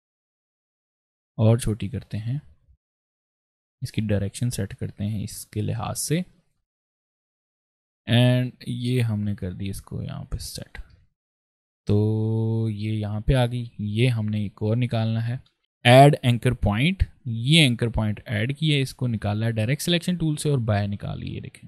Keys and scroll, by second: 0.3 v, 1.2 a, 5.7 v, 5.9 space, 7.2 space, 7.7 a, 10.3 v, 10.7 ctrl+space, 11.4 ctrl+space, 14.3 ctrl+space, 18.5 a.